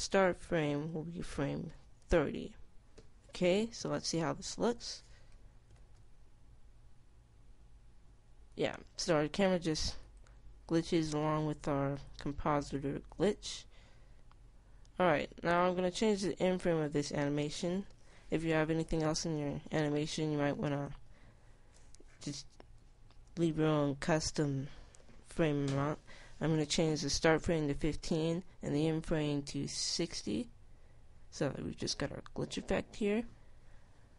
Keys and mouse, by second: 7.0 alt+a, 13.0 click, 30.8-32.7 drag.